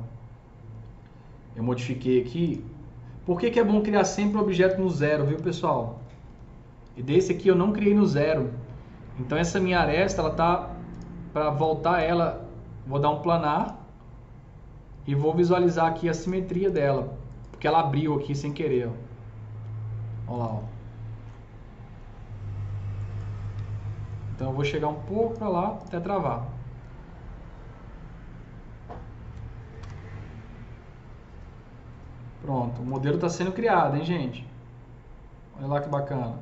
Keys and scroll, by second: 4.5-5.7 typing, 6.1 F3, 23.5 s, 29.4-30.2 typing.